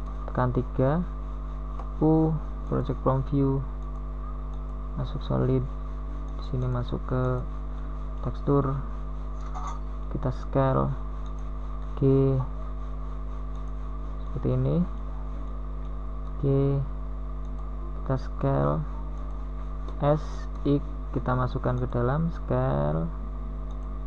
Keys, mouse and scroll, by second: 0.1-1.9 middle drag, 1.9 KP_3, 2.5 z, 3.2 a, 6.1 b, 8.3 middle click, 8.5 middle click, 9.8 KP_3, 12.6 u, 19.9 s, 21.5 g.